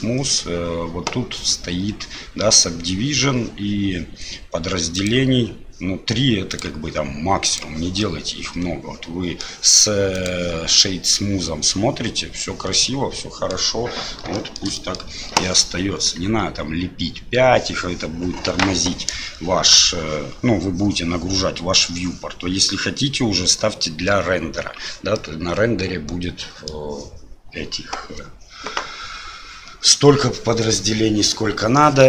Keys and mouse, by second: 4.9 click, 6.5 click, 7.4 click, 8.0-9.4 middle drag, 10.2-11.4 drag, 11.6-13.5 middle drag, 14.3 shift+middle drag, 14.7 middle drag, 25.1-26.7 middle drag.